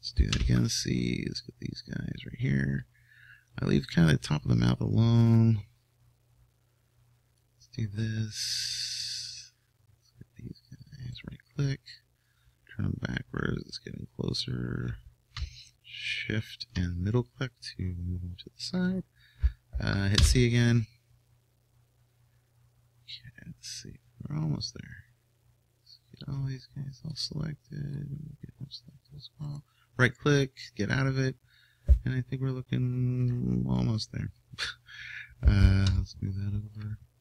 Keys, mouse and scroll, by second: 0.2 c, 0.8 c, 11.6 middle click, 15.6 middle click, 20.2 c, 36.0-37.2 middle drag.